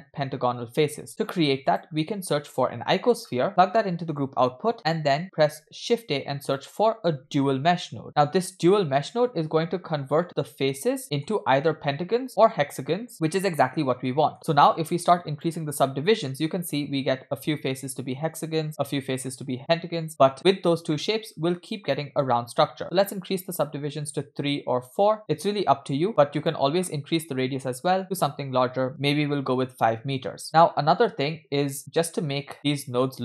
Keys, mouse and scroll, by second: 1.1 shift+a, 3.5 click, 4.7 click, 5.7 shift+a, 9.3-10.2 scroll up 5, 10.2-11.3 middle drag, 12.1-14.3 middle drag, 15.3 click, 18.8-19.2 middle drag, 20.1 scroll down 3, 21.0-22.2 middle drag, 23.0 click, 24.4 click, 25.8 scroll up 2, 25.8 scroll down 1, 26.4-28.9 drag, 30.4-33.2 drag.